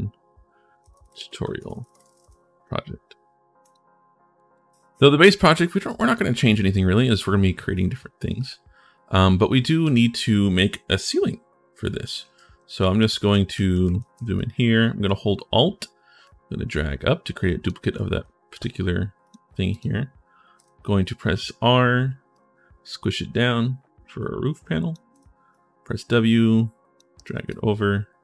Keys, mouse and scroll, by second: 0.0-2.4 typing, 3.4 click, 4.6-5.8 drag, 6.2-7.3 drag, 7.7 click, 8.2 click, 9.6 click, 12.1-14.4 typing, 12.1-14.1 right drag, 17.7 right click, 17.9 a, 18.3 d, 19.0 click, 19.5 click, 22.1 click, 24.9 w, 27.4-28.2 right drag.